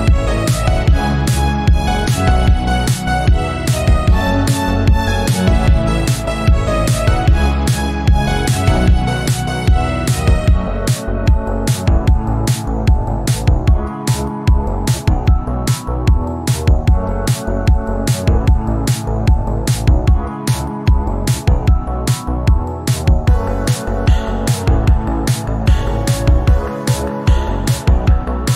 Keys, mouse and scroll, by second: 3.8 KP_1, 4.9-5.8 scroll up 5, 7.0 alt+z, 7.8 alt+z, 8.4 Tab, 8.8 1, 9.5 alt+z, 10.2 s, 11.3 scroll up 5, 11.8 shift+middle click, 12.5-13.9 drag, 14.0-16.1 drag, 16.1 s, 17.9 scroll down 2, 18.2 shift+middle click, 18.8 click, 19.5 s, 21.4 shift+middle click, 22.2 e, 24.8 s, 26.2 shift+middle click, 26.7 e.